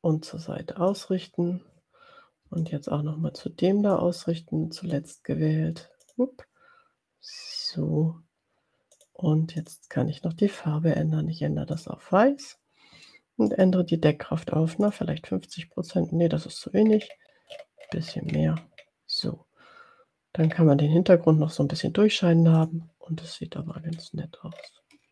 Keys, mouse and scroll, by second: 1.0 click, 2.6 shift+click, 4.2-5.2 drag, 8.9 click, 9.6 click, 11.8 click, 13.5 right click, 14.9 click, 16.9-18.0 scroll up 1, 18.1-19.0 scroll up 2, 20.6 scroll up 1, 22.7 click, 23.8-24.2 ctrl+scroll down 2, 24.7 ctrl+scroll up 2.